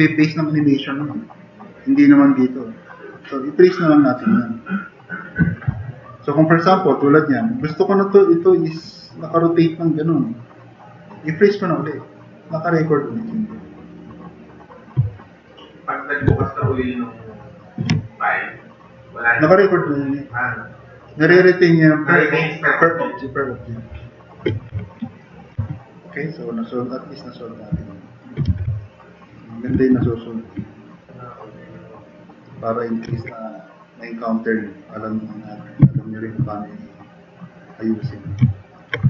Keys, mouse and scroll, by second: 8.3-10.2 drag, 15.1 click, 15.8 click, 16.3 w, 16.8 click, 17.0 click, 24.9 click, 25.3 click, 25.6 alt+q, 26.5 drag, 28.5 e, 29.8 w, 31.7 click, 33.1 ctrl+z, 35.8 s.